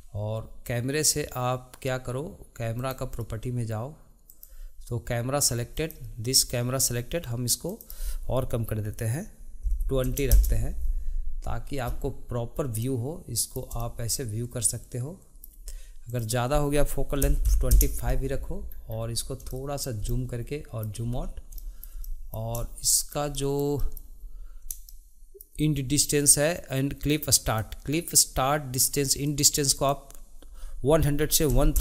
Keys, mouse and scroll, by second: 2.9-4.6 drag, 5.9 click, 7.8-11.0 drag, 12.9-16.2 middle drag, 16.2-18.8 drag, 18.8-19.2 scroll down 2, 19.6-21.2 shift+middle drag, 21.2-21.7 scroll up 1, 21.7-27.6 shift+middle drag, 27.6-29.5 drag, 29.9-31.8 drag.